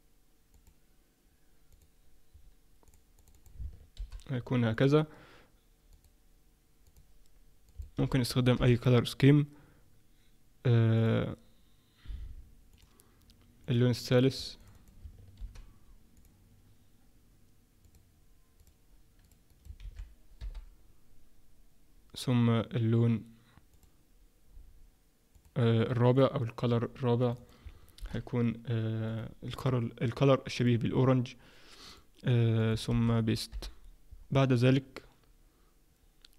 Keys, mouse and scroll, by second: 5.9 click, 6.9 click, 17.8 click, 18.6 click, 30.6 click, 31.9 click, 35.3-36.3 scroll up 1.